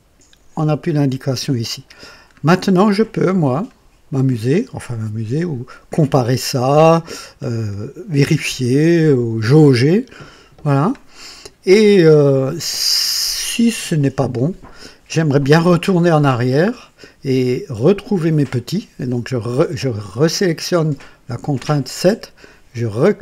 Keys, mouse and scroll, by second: 1.9-2.3 scroll down 2, 3.4-11.1 drag, 17.7 click, 23.1 click.